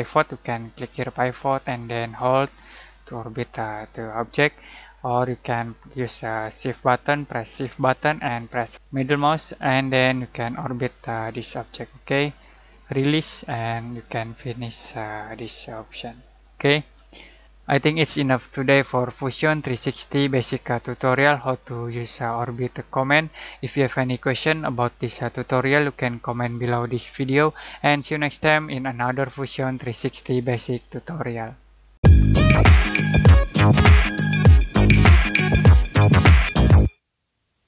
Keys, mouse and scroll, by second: 0.7-8.7 drag, 8.7-15.4 shift+middle drag, 15.4-18.3 middle drag, 18.0 typing.